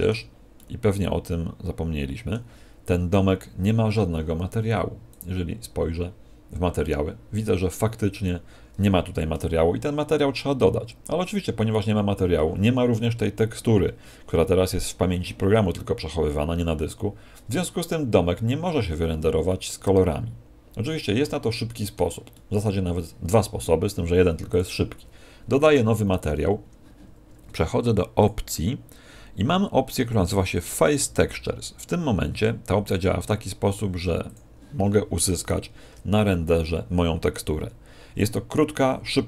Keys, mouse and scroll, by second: 0.5 middle click, 5.0 click, 19.4 middle click, 22.3 middle click, 24.4 click, 28.1 click, 34.2 click, 38.4 Escape.